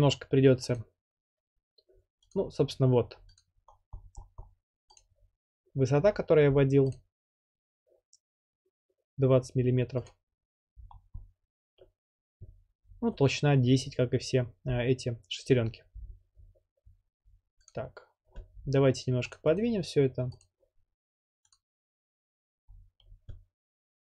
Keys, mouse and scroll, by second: 0.8 click, 2.3-3.7 drag, 3.7-5.0 scroll, 5.0 click, 6.9 click, 10.1 click, 10.9-12.2 scroll, 17.7 click, 19.3 click, 19.6 right click, 20.5 click, 21.5-22.7 drag, 22.7-23.8 scroll up 3, 23.8 scroll up 1.